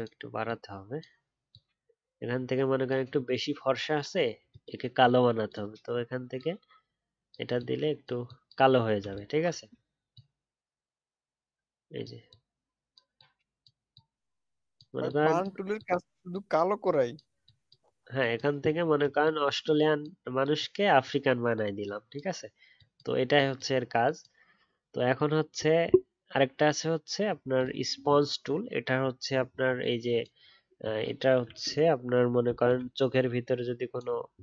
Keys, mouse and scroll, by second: 28.5 alt+scroll up 1, 28.9-29.4 alt+scroll down 1, 29.4-29.9 alt+scroll up 3.